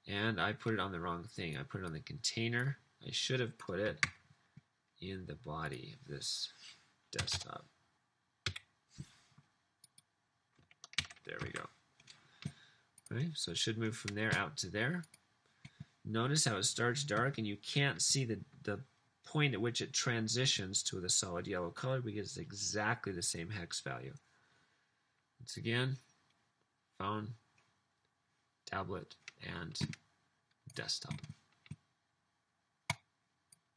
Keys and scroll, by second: 4.1 super+x, 7.3 Return, 9.4 Up, 11.0 super+v, 11.5 super+s.